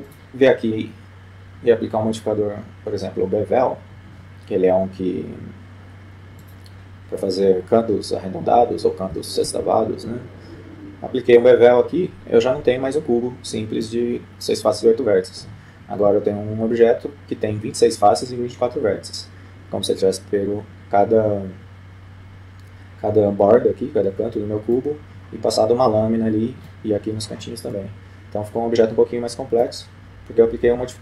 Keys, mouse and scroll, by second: 0.3-1.7 drag, 9.8 F12, 11.7-13.1 middle drag, 25.1-26.6 middle drag, 28.2-29.6 middle drag.